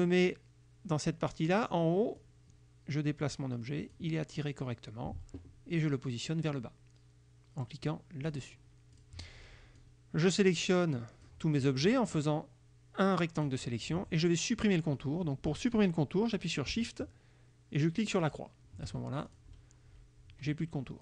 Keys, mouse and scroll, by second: 2.3-4.2 drag, 8.4 click, 9.0 click, 9.8-11.5 drag, 12.1-13.7 drag, 18.3 shift+click, 19.4 shift+click.